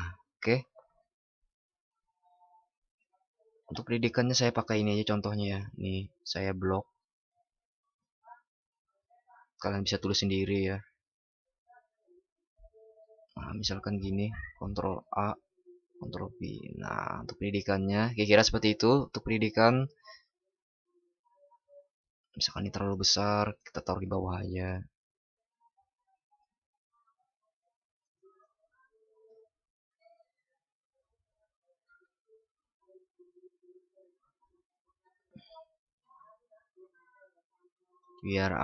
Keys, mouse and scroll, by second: 8.5 ctrl+shift+b, 14.6 ctrl+shift+@.